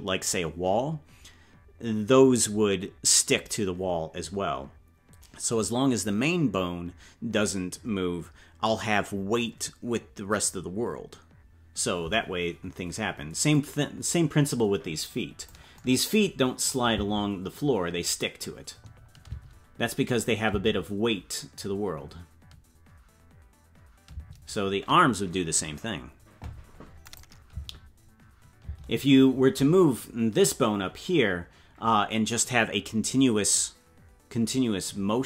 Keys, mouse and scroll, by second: 13.5-15.5 drag, 16.9 space, 20.0 click, 20.0 space, 20.4 space, 24.2 space, 27.0 click, 27.5 space, 29.1 space.